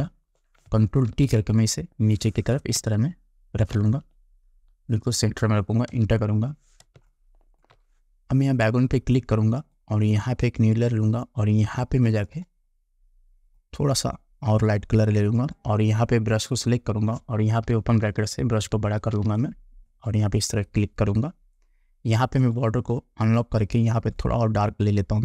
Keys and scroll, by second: 1.2 ctrl+t, 2.9 space, 6.0 Return, 7.1 space, 17.8 ].